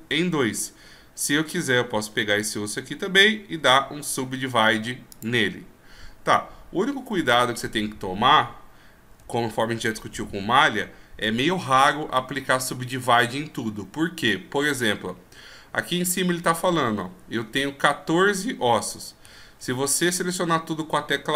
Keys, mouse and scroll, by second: 1.2 right click, 1.7-2.5 scroll up 2, 3.6 w, 6.7-7.1 scroll down 2, 9.3 scroll down 2, 10.5 shift+scroll up 2, 19.6 a.